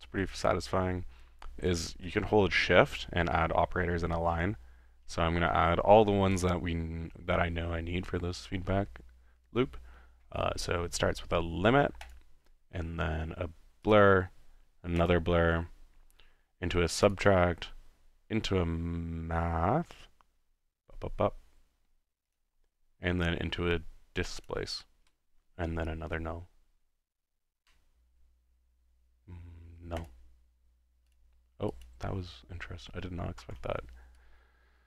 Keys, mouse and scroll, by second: 12.1-13.2 shift+drag, 14.0 click, 15.1 click, 17.1 click, 22.3 click, 24.4 click, 30.0 click, 31.1 click, 31.7 click, 33.4 ctrl+x, 34.2-34.8 ctrl+drag.